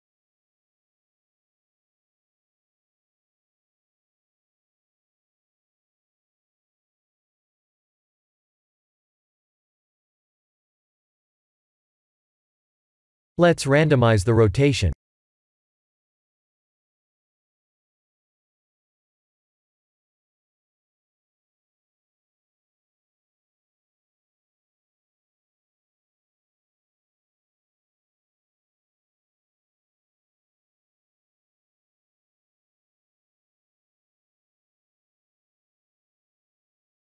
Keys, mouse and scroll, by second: 0.5 click, 1.1 click, 2.6 click, 3.4 s, 6.6-7.1 scroll down 4, 7.1 middle click, 7.7 middle click, 8.0 g, 11.0 middle click, 11.9 middle click, 14.4 click, 16.6 click, 21.4 click, 24.9 click, 26.8 click, 30.1 KP_1, 31.0 KP_7, 32.5-33.2 scroll up 3, 33.5-34.2 scroll up 3, 34.3 shift+middle click, 36.0 shift+middle click.